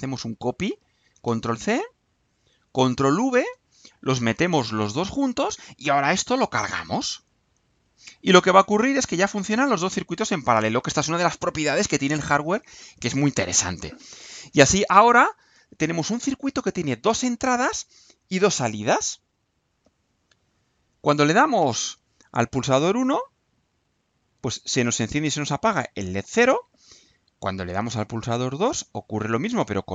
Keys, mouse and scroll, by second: 1.1 ctrl+c, 2.1 click, 3.0 ctrl+v, 3.9-5.4 ctrl+drag, 7.2 click, 11.6 click.